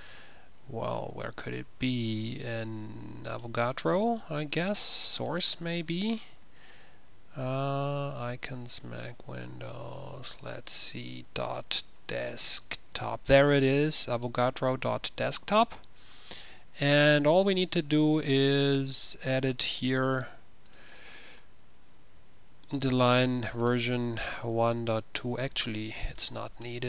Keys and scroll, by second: 11.0 ctrl+f, 11.4-13.5 typing, 19.6 ctrl+f, 19.6 typing, 19.8 ctrl+-.